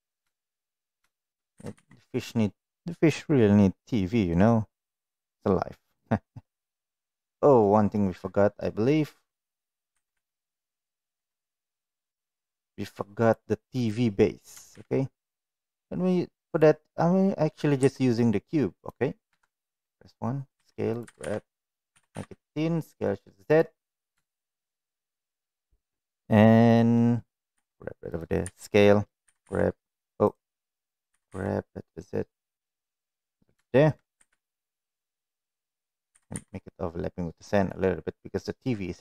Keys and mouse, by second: 0.0 s, 0.3 shift+middle click, 1.5 g, 6.3-7.4 middle drag, 7.6 middle click, 8.1 middle click, 9.9 g, 13.2 drag, 13.8-14.1 middle drag, 14.6 shift+a, 19.2 s, 19.2 KP_1, 20.5 s, 21.0 g, 21.8 s, 24.4 shift+middle drag, 27.5 g, 28.4 s, 29.4 z, 30.5 right click, 31.1 g, 33.6 shift+middle click, 36.1 g.